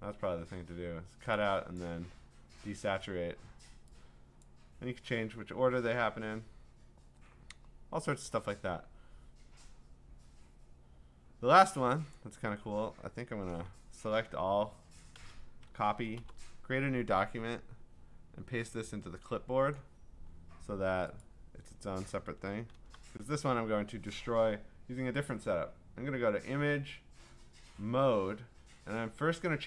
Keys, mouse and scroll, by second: 1.8 click, 4.5 click, 6.7 click, 8.3 click, 8.8-9.9 drag, 11.6 click, 12.2 click, 14.1 ctrl+a, 15.2 ctrl+c, 16.2 ctrl+n, 19.8 click, 21.2 click, 22.7 ctrl+v, 25.3 click.